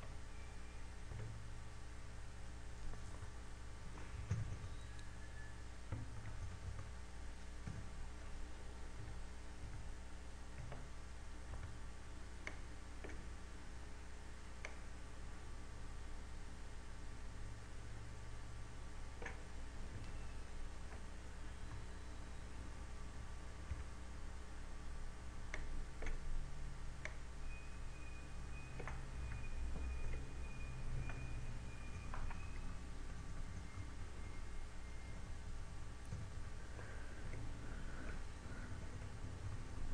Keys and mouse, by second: 1.2 z, 1.8 Tab, 4.6 b, 6.1 KP_6, 8.2 KP_6, 8.8 KP_8, 10.6 a, 12.0 z, 13.0 b, 16.2 click, 21.0 Escape, 21.8 ctrl+z, 22.0 a, 25.0 b, 28.2 click, 30.7 a, 31.0 Tab, 32.2 z, 33.4 KP_4, 33.6 KP_4, 35.0-37.8 typing, 38.8 Tab.